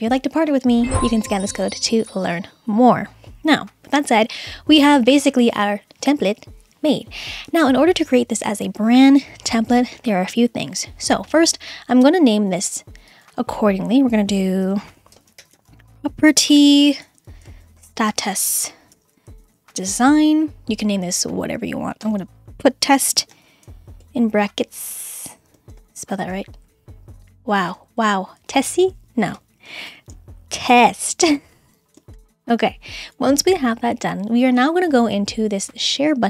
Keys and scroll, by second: 14.9-20.5 typing, 22.1-24.0 typing, 25.7 shift+BackSpace, 25.9 shift+y, 26.1 shift+o, 26.5 Left, 27.8 Right, 28.4 BackSpace, 29.9-32.2 typing.